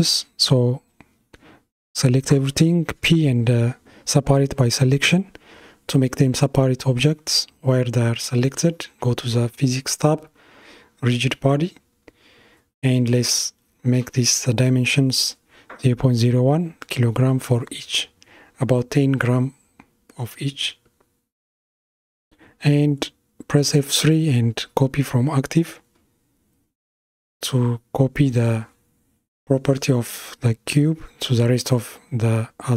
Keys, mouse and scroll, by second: 0.8 Tab, 2.4-5.4 middle drag, 8.0 click, 9.1-14.7 drag, 19.7 F3, 28.9-32.0 middle drag, 32.5 Tab.